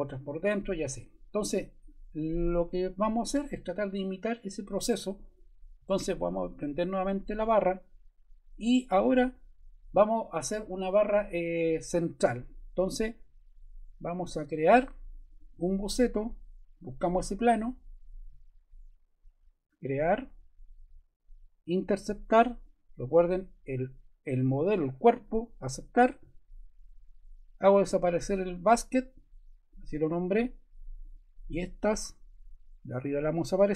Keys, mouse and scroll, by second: 32.9 BackSpace.